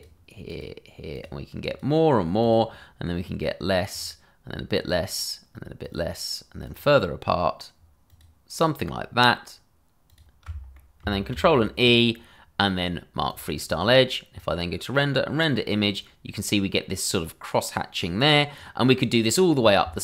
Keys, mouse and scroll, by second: 0.5 alt+shift+click, 0.9 click, 1.9 click, 2.4 alt+shift+click, 2.9 click, 3.9 click, 4.9 click, 5.8 click, 6.6 alt+shift+click, 6.9 click, 8.1 alt+shift+click, 10.1 click, 10.7 middle click, 13.3 click.